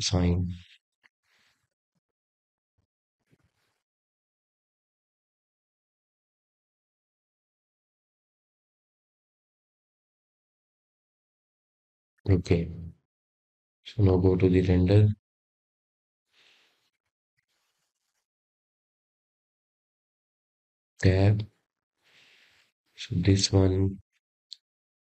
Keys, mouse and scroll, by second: 0.2 ctrl+KP_Subtract, 4.6-5.2 drag, 5.6-8.7 middle drag, 9.5-12.5 middle drag, 19.3 click, 20.8-23.9 middle drag.